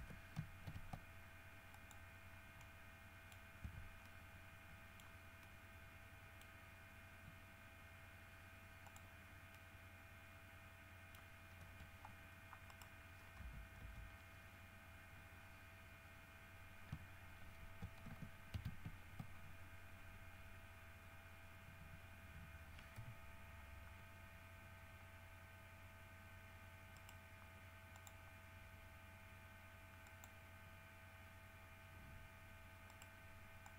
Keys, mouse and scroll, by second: 0.2 shift+KP_Enter, 0.9 ctrl+e, 1.9 middle click, 2.5 scroll down 2, 2.8 middle click, 3.5-3.9 scroll up 2, 3.9 Tab, 3.9-5.2 middle drag, 5.2 scroll up 1, 5.7 middle click, 6.7 middle click, 9.0 click, 9.7-11.6 middle drag, 12.9 right click, 13.6 KP_Decimal, 14.0 KP_3, 15.6 scroll up 2, 16.0 scroll down 2, 18.8 ctrl+alt+q, 23.2 n, 27.2 right click, 28.2 click, 30.3 click, 33.1 right click.